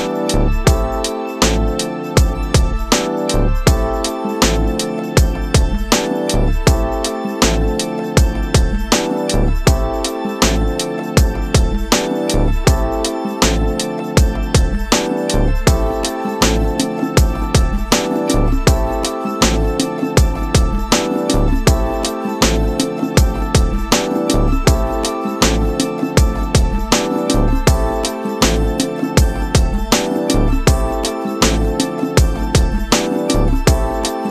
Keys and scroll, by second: 0.2 space, 3.0 ctrl+KP_Subtract, 3.9 w, 5.6 Return, 6.4 ctrl+KP_Subtract, 7.4 ctrl+u, 9.8 Return, 10.1 space, 10.7 shift+F2, 11.3 space, 13.0 Return, 14.5 alt+space, 14.9 c, 15.2 Return, 15.8 ctrl+KP_Add, 16.3 ctrl+space, 17.1 w, 19.0 Return, 19.7 shift+F2, 20.1 ctrl+d, 20.2 ctrl+space, 22.0 ctrl+alt+d, 22.3 Return, 23.0 shift+F2, 23.6 ctrl+KP_Add, 23.9 ctrl+g, 25.2 ctrl+space, 25.8 Return, 29.4 ctrl+space, 30.1 s, 32.5 s, 33.4 Return.